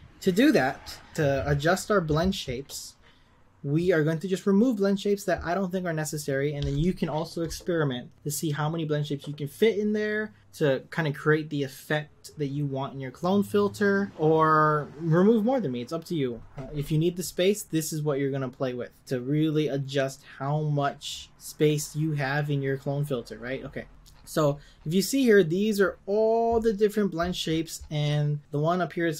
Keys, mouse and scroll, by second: 28.4 click.